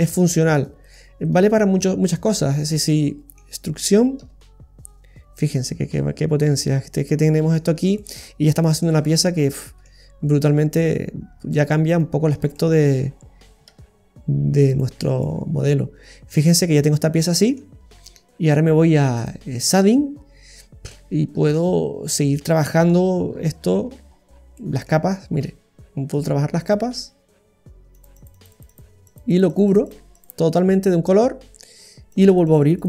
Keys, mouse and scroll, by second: 0.1-2.3 shift+right click, 2.4-3.0 scroll down 5, 2.8 middle click, 4.2 e, 5.4 typing, 5.7 middle click, 7.7-8.1 scroll down 2, 7.9 middle click, 8.9-9.6 scroll up 3, 9.4 middle click, 10.8 right click, 11.5 ctrl+right click, 11.9 ctrl+right click, 12.2 ctrl+right click, 12.5 middle click, 13.8 e, 14.9 typing, 15.0-15.5 scroll down 2, 15.2 middle click, 17.8 scroll up 1, 19.2 click, 19.7-21.0 scroll down 14, 20.9 middle click, 21.9 scroll up 1, 21.9 scroll down 2, 22.7 middle click, 23.1-24.9 scroll up 17, 24.6 middle click, 26.6 click, 27.9-29.3 click, 32.1-32.8 click, 32.3 click.